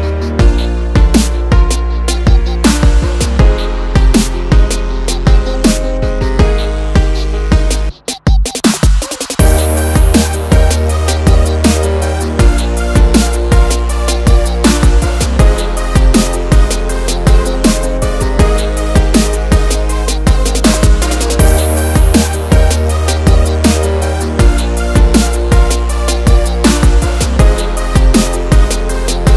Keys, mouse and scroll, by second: 0.5 F9, 1.8 click, 2.0 double click, 2.6 ctrl+o, 3.4 scroll down 1, 4.6 click, 5.5 click, 12.3 click, 13.4 click, 16.8 click, 17.5 double click, 18.1 click, 18.8 Page_Down, 22.3 click, 22.6 double click, 26.5 click, 28.6 click, 29.2 double click.